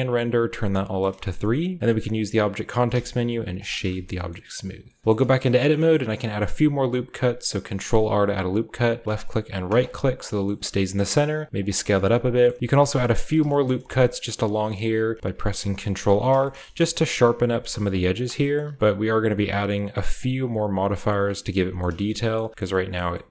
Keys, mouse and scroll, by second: 0.1 click, 0.9-1.7 shift+middle drag, 1.8 shift+scroll up 1, 1.8 q, 2.8 typing, 3.5 click, 4.0 shift+middle click, 4.2-4.8 scroll up 1, 4.8 scroll up 1, 5.0 shift+Tab, 5.5-8.8 middle drag, 5.5-8.8 scroll up 1, 6.5 ctrl+r, 9.0 click, 9.6 right click, 9.7-11.1 middle drag, 10.4-14.4 scroll up 1, 10.8 s, 11.3 click, 11.5 g, 12.6 ctrl+r, 12.8 click, 13.7-16.7 ctrl+middle drag, 13.7 typing, 13.8 ctrl+r, 15.5 ctrl+r, 17.1 middle click, 17.5 middle click, 17.7 ctrl+r, 17.9 middle click, 18.1 middle click, 18.5-20.2 shift+middle drag, 18.5-19.7 shift+scroll down 1, 21.3 middle click, 21.3-22.0 scroll down 1, 22.0-22.5 shift+scroll up 1, 22.4-23.3 typing, 23.2-23.3 shift+middle drag, 23.2-23.3 shift+scroll up 1.